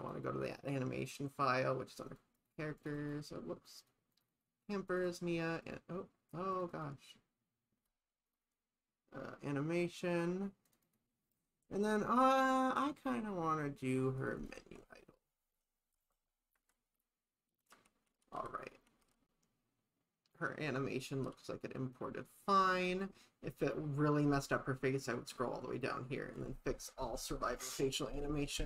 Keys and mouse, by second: 16.6 shift+`.